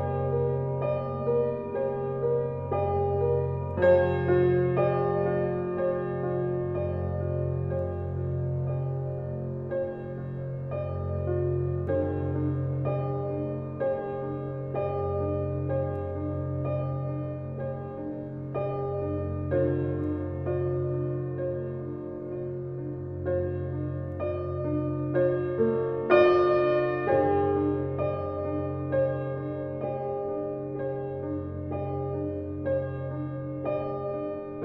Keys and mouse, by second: 1.9 s, 4.3 click, 5.0-5.4 typing, 6.0 click, 6.9-8.6 ctrl+alt+drag, 8.6 alt+a, 8.9 typing, 9.1-12.2 alt+drag, 12.6 ctrl+alt+click, 15.0 typing, 15.1 click, 16.1 click, 16.9 ctrl+s, 17.9 click, 19.2 click, 21.1 click, 21.5 click, 21.8-22.8 drag, 22.9 Delete, 23.1 Delete, 23.4-24.6 typing, 25.4 click, 27.5-28.6 drag, 29.4 click, 30.7 typing, 31.9 click, 33.2 click.